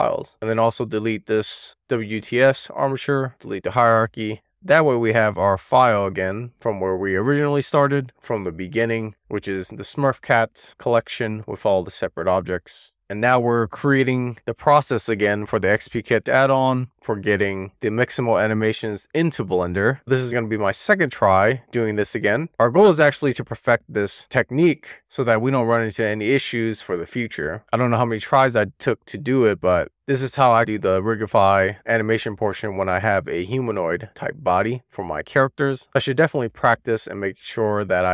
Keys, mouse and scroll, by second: 0.4 click, 0.8-6.9 right drag, 6.9 click, 10.3 click, 12.8 click, 13.8-15.0 scroll down 1, 15.0-17.4 middle drag, 18.9-20.4 scroll up 1, 20.4 click, 23.2-28.1 middle drag, 29.9-31.5 shift+middle drag, 32.1-34.1 middle drag, 34.7-35.7 shift+middle drag.